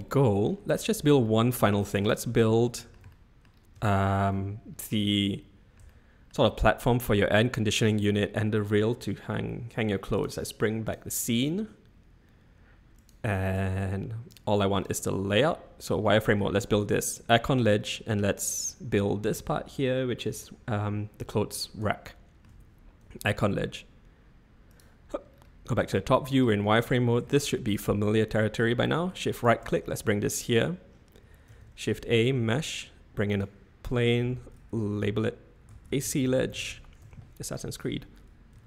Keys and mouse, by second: 1.2-1.7 middle drag, 2.6 shift+middle drag, 3.1-3.4 middle drag, 3.8-4.2 shift+middle drag, 5.8-6.3 shift+middle drag, 10.9 click, 12.9-13.5 drag, 13.5-14.4 drag, 14.7 click, 15.3 z, 16.1-16.4 middle drag, 17.6 middle click, 22.0-22.4 shift+middle drag, 24.7 click, 24.8 middle click, 25.9-26.2 shift+middle drag, 27.2-27.7 shift+middle drag, 31.5 shift+a, 34.2 F2, 38.5 s.